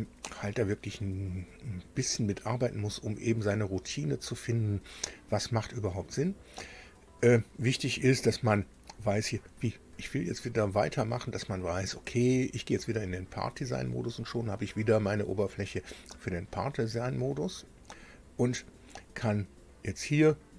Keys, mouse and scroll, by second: 6.6 click, 8.7 click, 11.7 click, 12.9 click, 17.6 click.